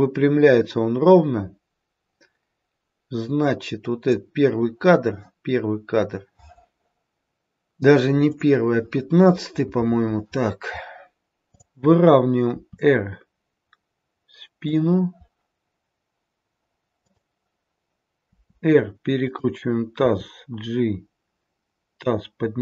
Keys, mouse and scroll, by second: 8.1 click, 11.3 click, 12.4 r, 17.0 click, 18.3 r, 19.9 g.